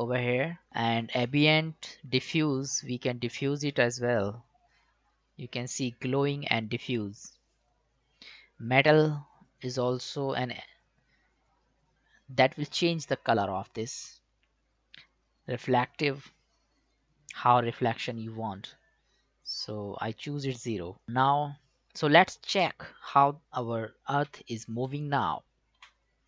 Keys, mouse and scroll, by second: 0.7 ctrl+z, 2.6-10.0 drag, 16.3 click, 16.4-21.0 drag, 24.3 Home, 25.8 space.